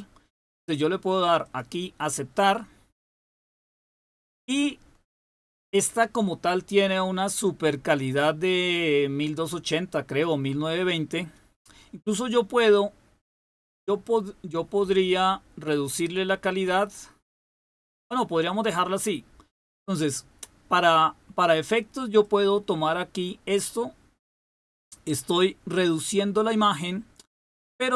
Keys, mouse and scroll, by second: 1.4 click, 22.2-26.8 drag, 27.5-27.9 drag.